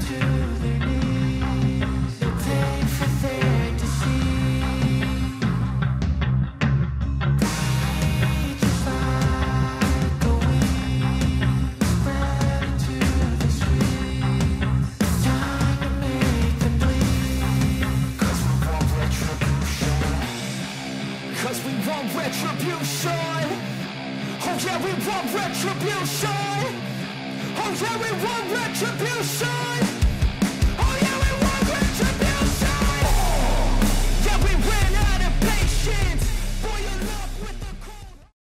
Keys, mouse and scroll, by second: 0.6 ctrl+=, 1.9-6.3 drag, 6.3 ctrl+right click, 7.2-11.4 ctrl+drag, 11.4 ctrl+right click, 15.8-17.7 drag, 17.7 ctrl+right click, 18.8-21.8 drag, 21.8 ctrl+right click, 23.0 ctrl+-, 24.2 click.